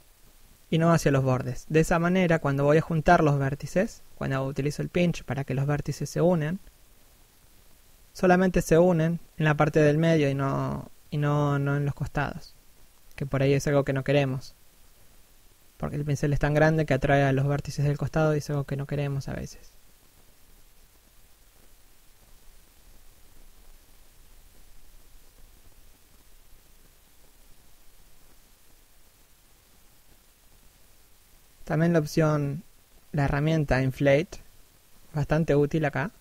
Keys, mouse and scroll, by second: 0.1 click, 4.3-4.6 scroll down 2, 4.6 shift+middle click, 6.0 click, 8.3 middle click, 10.1 f, 10.4 click, 10.7 scroll up 1, 11.0 scroll down 1, 11.3 click, 16.7 middle click, 17.0 middle click, 19.3-19.7 scroll up 1, 19.7 click, 25.5-26.0 scroll down 1, 26.0 middle click, 29.6 click, 33.4-34.0 scroll up 1, 35.7 right click.